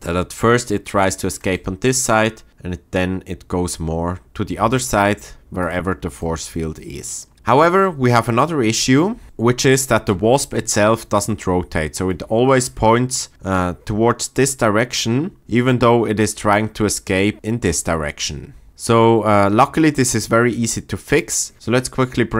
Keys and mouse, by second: 4.5 space, 7.1-7.7 shift+middle drag, 7.8 drag.